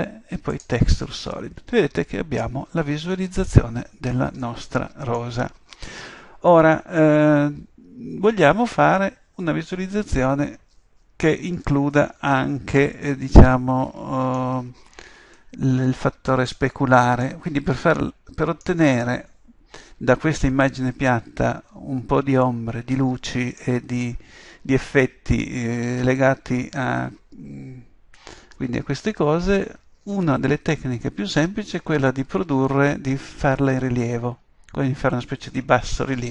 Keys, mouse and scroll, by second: 0.1 click, 1.9-3.4 middle drag, 15.4-19.4 middle drag.